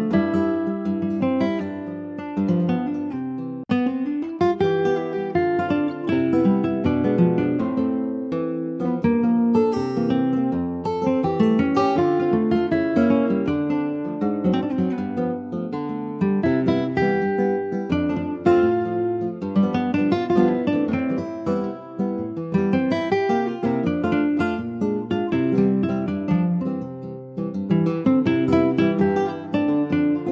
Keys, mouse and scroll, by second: 0.3 alt+middle click, 0.6 alt+middle click, 1.4 scroll up 1, 1.7 shift+middle click, 2.2 s, 5.8 ctrl+s, 6.1 Tab, 7.1 click, 7.5 middle click, 8.1 Tab, 8.7 ctrl+s, 8.9 Tab, 9.1 click, 9.4 middle click, 9.7 scroll down 2, 10.0 Tab, 10.2 click, 10.4 scroll down 1, 10.7 middle click, 10.9-11.7 ctrl+scroll up 2, 11.0 ctrl+s, 11.1 ctrl+click, 11.7 click, 11.9 Tab, 12.3 scroll up 2, 12.5-13.7 middle drag, 13.7 Tab, 14.3 click, 14.9 ctrl+a, 16.0 Tab, 16.9 ctrl+r, 22.5 middle click, 23.1 2, 23.3 click, 24.4 3, 24.8 click, 26.1 middle click, 26.7 e.